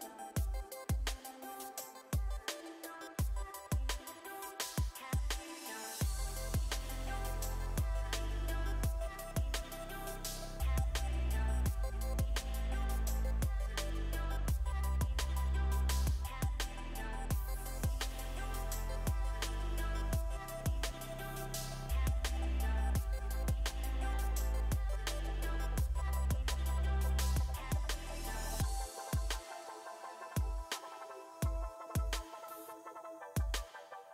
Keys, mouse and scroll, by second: 0.1 click, 1.1 r, 2.7 click, 3.2 r, 4.8 click, 5.7 g, 10.1 s, 14.5 click, 14.8 middle click, 16.6 click, 17.5 s, 19.7-21.6 middle drag, 21.6 KP_3, 22.1 KP_1, 22.5 KP_3, 23.5-24.6 middle drag, 25.9 click, 27.6 middle click, 27.8-29.8 drag, 29.2 KP_3, 30.9 s.